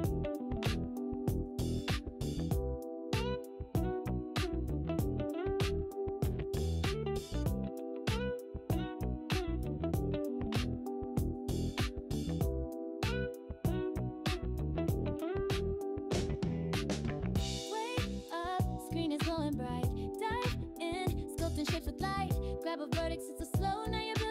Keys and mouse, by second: 1.7 click, 8.9 click, 11.2 click, 12.2 g, 19.9 click, 20.3-21.6 drag, 22.7 click, 23.8-24.3 drag.